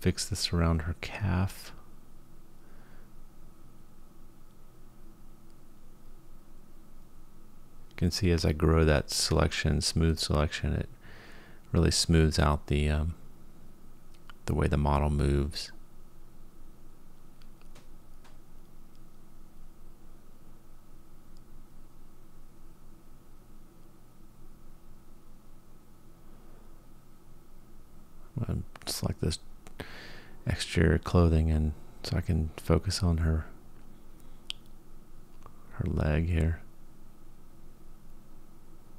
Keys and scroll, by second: 0.3 g, 3.3 space, 4.7 g, 9.6 g, 13.3 g, 16.3 g, 18.1 g, 20.0 g, 22.8 g, 26.7 Tab, 27.3 Tab, 27.9-28.7 ctrl+KP_Add, 28.8 h, 29.4 Tab, 30.3 Tab, 31.8 alt+h, 32.8-33.5 ctrl+KP_Add, 33.8 Delete, 34.9 Tab, 35.9 Tab, 36.4 g.